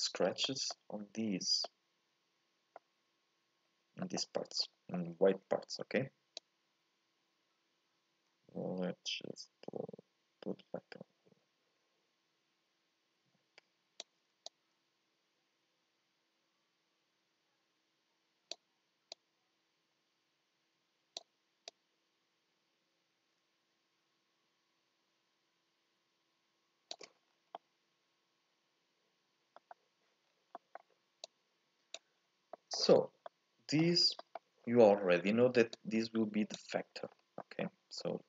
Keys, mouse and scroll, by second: 0.0-4.7 middle drag, 4.7 scroll up 1, 4.9-6.6 middle drag, 6.6-9.4 drag, 14.6-17.4 drag, 19.5-24.7 drag, 27.2 scroll down 1, 27.5-29.5 middle drag, 29.5-31.5 scroll up 1, 33.3-34.9 middle drag, 34.9-36.8 scroll down 2.